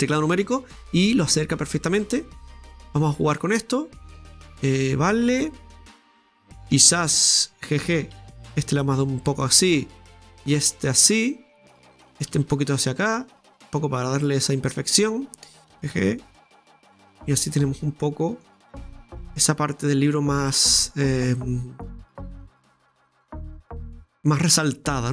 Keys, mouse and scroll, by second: 0.1 scroll down 1, 1.5-6.9 drag, 6.9 right click, 8.2 g, 10.4 right click, 10.5 g, 12.1 right click, 12.3 g, 13.4 scroll down 1, 13.7-15.6 middle drag, 15.6 alt+shift+right click, 15.7 g, 17.3-18.6 middle drag, 18.6-18.9 scroll down 1, 19.1-22.1 middle drag, 24.9 scroll down 2, 24.9 middle click.